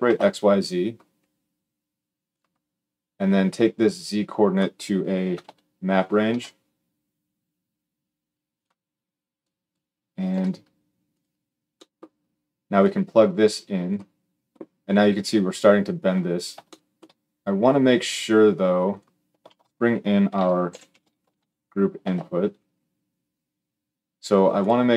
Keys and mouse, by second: 2.2-3.5 middle drag, 3.5-8.4 drag, 8.4-9.2 middle drag, 9.2-10.9 drag, 10.3 g, 10.9-12.5 middle drag, 12.5-18.7 drag, 19.2 shift+a, 22.9-24.9 middle drag.